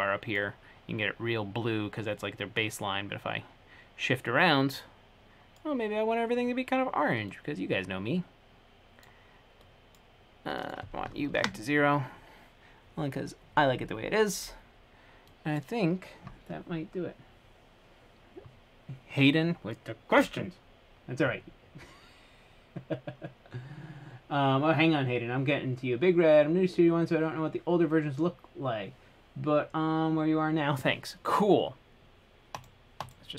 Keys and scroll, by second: 11.6 0, 11.6 Return.